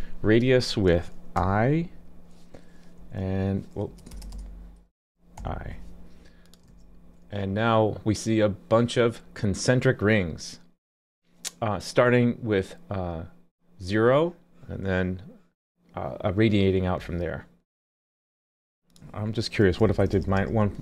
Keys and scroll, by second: 6.7 super+s.